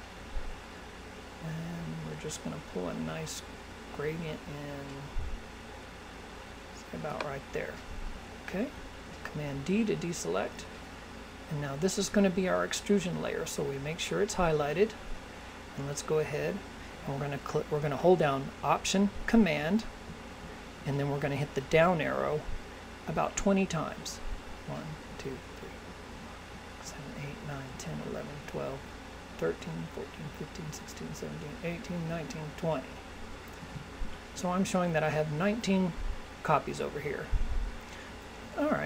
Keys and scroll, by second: 8.9 super+d, 24.5 alt+super+Down.